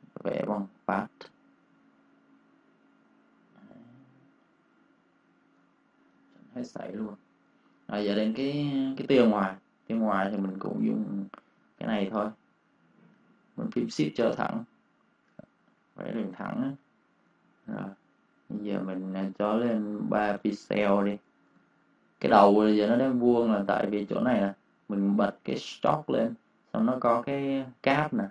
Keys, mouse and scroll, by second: 0.4 click, 5.5 v, 5.8 click, 6.0 space, 6.2 click, 6.7-7.1 -, 7.4 space, 7.6 click, 10.1 \, 11.2 ctrl+space, 11.4 ctrl+click, 15.4-17.2 typing, 15.7 click, 17.3 click, 20.3 ctrl+space, 20.4 ctrl+click, 21.4 ctrl+space, 21.5 ctrl+click.